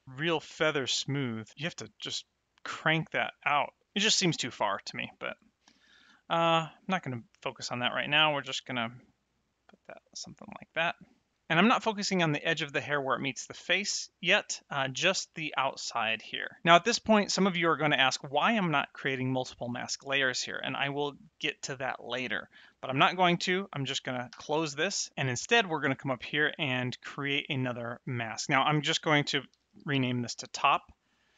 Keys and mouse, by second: 4.9 click, 24.3 n, 28.3 click, 29.7 t, 29.7 o, 29.9 p.